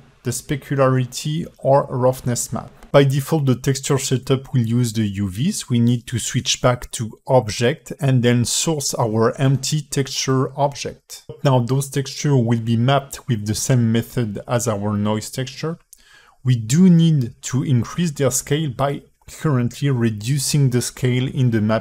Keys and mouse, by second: 10.1 click, 12.4 shift+a, 12.7-14.3 drag, 18.3-21.0 drag.